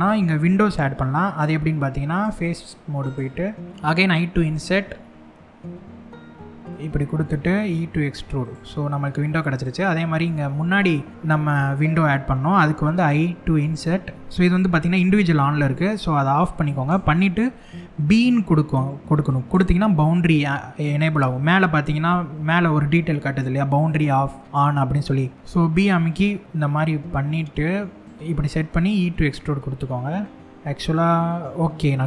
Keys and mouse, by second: 6.5 click, 6.7 middle click, 7.3 e, 8.0 click, 9.2 click, 10.7 middle click.